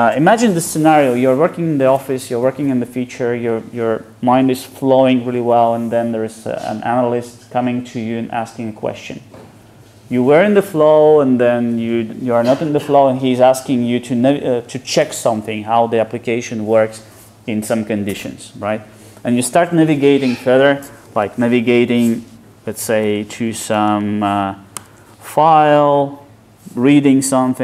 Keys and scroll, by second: 21.3 super+e.